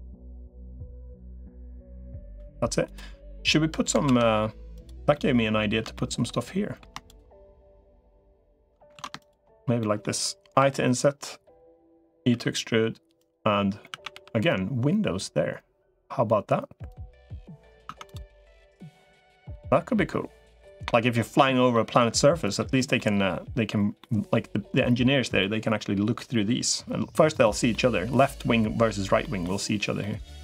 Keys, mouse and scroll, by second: 1.1 middle click, 2.3 3, 3.9 ctrl+s, 4.9 middle click, 5.7 shift+middle click, 8.9 ctrl+shift+z, 9.6 middle click, 10.5 i, 11.7 middle click, 12.1 e, 13.7 a, 13.9 g, 17.7 Tab, 18.1-21.0 middle drag, 21.5 middle click, 22.8 middle click, 23.8 middle click, 25.2 middle click, 27.5-28.6 middle drag, 29.0 middle click, 29.8 middle click.